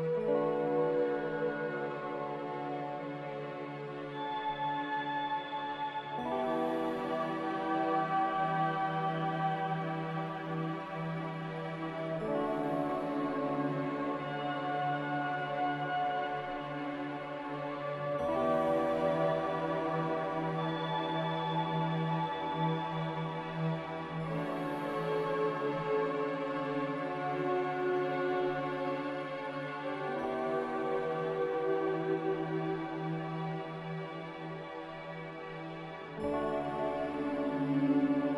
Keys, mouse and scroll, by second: 0.5 3, 0.6 Return, 25.9 z, 30.5 a.